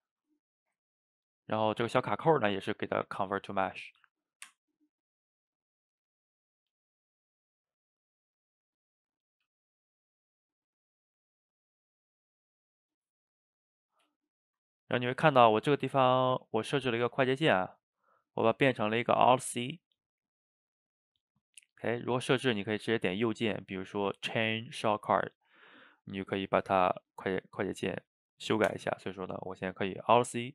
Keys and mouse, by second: 1.2 click, 2.7-5.7 drag, 5.8-8.8 drag, 9.0-9.8 middle drag, 9.8 click, 10.9-13.7 drag, 14.2 shift+middle click, 15.0-18.1 drag, 29.6-30.4 middle drag, 30.4 alt+c.